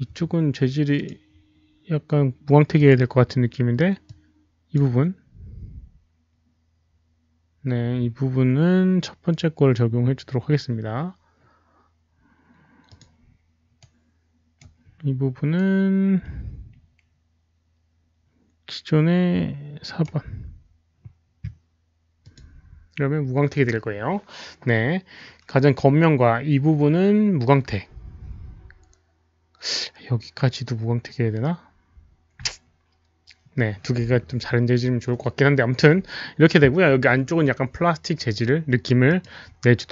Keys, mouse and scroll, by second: 0.9 click, 2.7 click, 4.0-4.7 drag, 6.0 click, 12.8 click, 13.8 right click, 15.6-20.6 right drag, 16.3 click, 22.2 click, 22.2 right click, 23.6 right click, 26.3 click, 39.0 click.